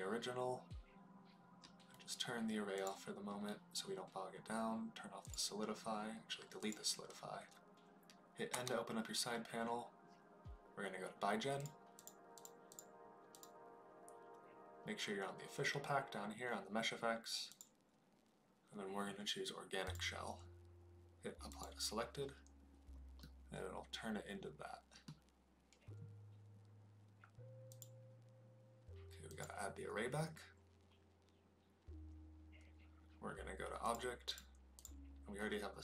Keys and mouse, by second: 2.7 click, 5.1 click, 6.6 click, 8.5 n, 11.9 click, 13.3 click, 17.5-19.9 drag, 23.1-25.0 middle drag, 27.8-29.4 drag, 33.8 click, 34.2 click, 34.8-35.8 drag.